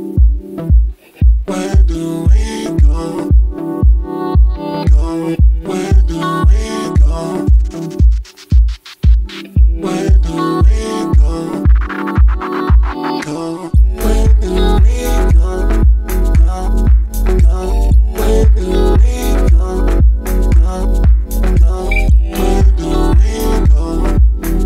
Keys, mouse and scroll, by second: 2.6 Tab, 3.2 middle click, 3.9 z, 5.1 scroll down 1, 5.6 Tab, 6.6 g, 11.7-13.8 drag, 13.8 ctrl+a, 18.0 ctrl+a, 19.9-23.0 drag.